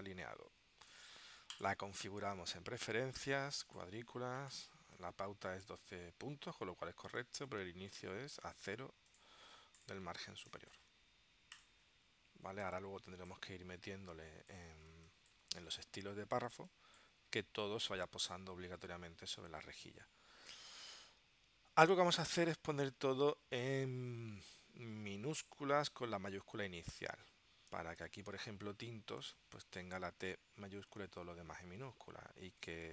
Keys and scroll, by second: 12.8 space, 16.5 space, 28.0 super+Tab, 29.4 space.